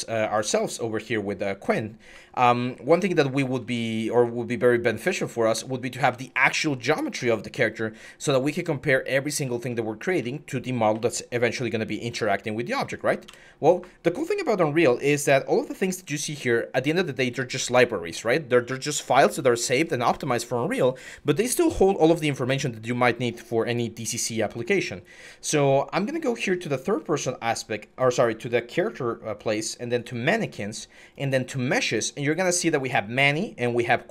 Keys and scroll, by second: 1.9-5.1 typing, 7.4-12.1 typing, 13.1 Escape.